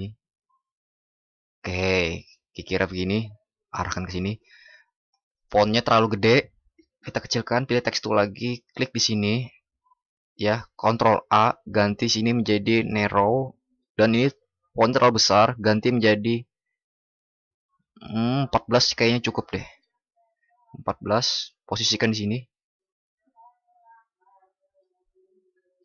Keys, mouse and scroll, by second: 10.8 ctrl+shift+@.